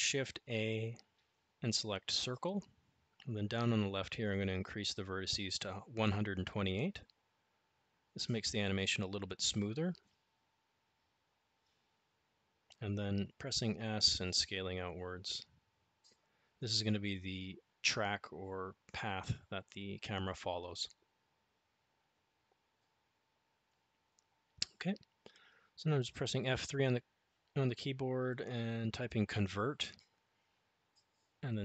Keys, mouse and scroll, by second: 4.3-9.5 drag, 11.0 s, 16.9 s, 23.5 F3.